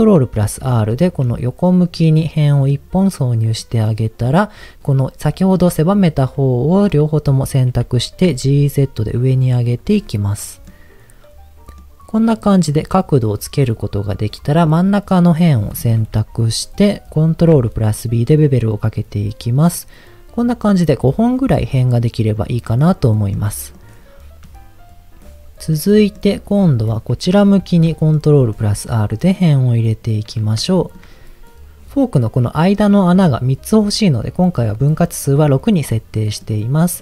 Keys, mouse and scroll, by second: 0.4 ctrl+r, 1.0-2.1 right drag, 2.1 middle click, 3.6 click, 5.9-6.9 middle drag, 7.8 g, 8.2 z, 9.6 click, 10.0 middle click, 11.8 middle click, 13.8 middle click, 14.2 click, 17.2 ctrl+b, 18.6-20.0 scroll up 2, 22.4 click, 23.4 middle click, 26.0 middle click, 27.6 ctrl+r, 29.9 right click, 30.7 shift+middle click, 36.2 middle click.